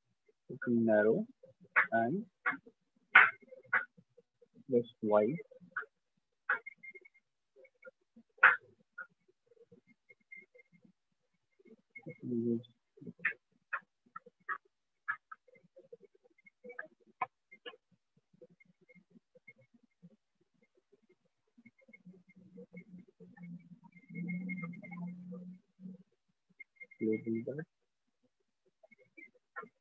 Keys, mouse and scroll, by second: 0.2 click, 1.6-2.1 click, 4.0 click, 4.5 click, 4.8 click, 4.9 click, 5.6 click, 7.8 click, 8.7 ctrl+click, 9.3 ctrl+z, 9.9 ctrl+click, 11.5 ctrl+click, 13.5 ctrl+click, 14.3 shift+click, 14.6 ctrl+click, 15.2 alt+click, 16.1 right click, 16.7 w, 19.0 click, 21.6 click, 22.1 ctrl+click, 22.7 click, 23.9-25.0 typing, 26.8 right click, 28.0 alt+right click.